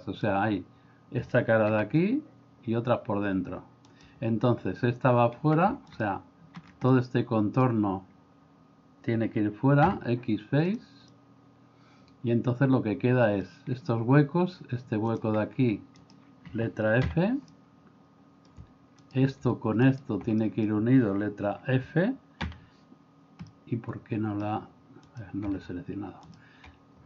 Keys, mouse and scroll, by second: 1.7 g, 6.9 middle click, 9.9 x, 11.1-13.5 middle drag, 17.1 f, 17.5-18.5 middle drag, 20.4 middle click, 22.5 f, 23.5 middle click.